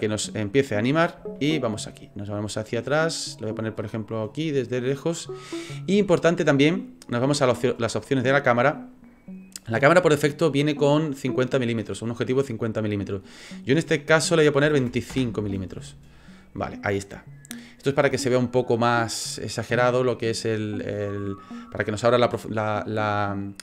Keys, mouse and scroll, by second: 1.4 shift+middle click, 2.1 scroll down 1, 2.9-4.4 scroll down 2, 4.4 middle click, 8.2 click, 13.1 click, 16.2 scroll up 4, 16.7 scroll down 1, 17.1 scroll down 1, 17.5-19.4 scroll down 1.